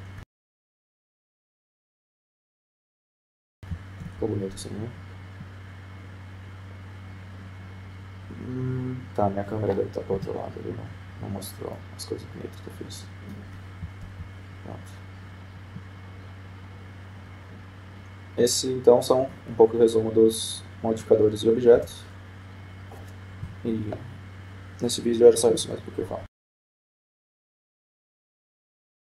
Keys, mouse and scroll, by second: 0.3 g, 2.9-4.3 right drag, 3.7 g, 6.9 F12, 12.4 KP_0, 13.5-14.8 middle drag, 14.9-16.5 middle drag, 16.5 F12, 23.5 Tab, 25.2 KP_0.